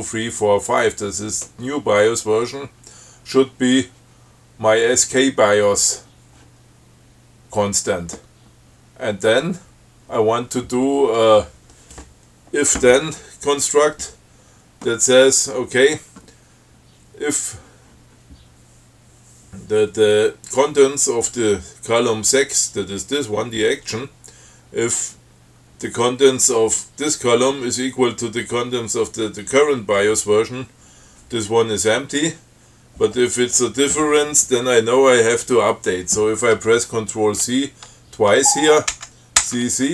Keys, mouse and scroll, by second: 39.1 ctrl+c.